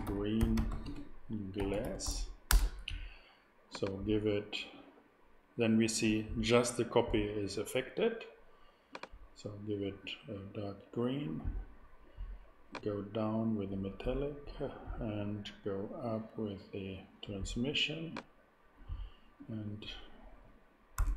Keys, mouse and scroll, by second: 0.0-2.0 typing, 2.5 Return, 3.7-5.9 drag, 8.9-11.3 drag, 12.7-15.7 drag, 20.9 i.